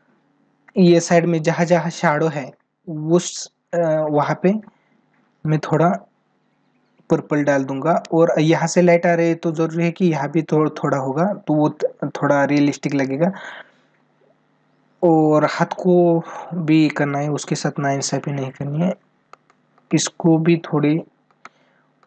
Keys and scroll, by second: 19.0 ctrl+alt+z, 21.0 ctrl+alt+z.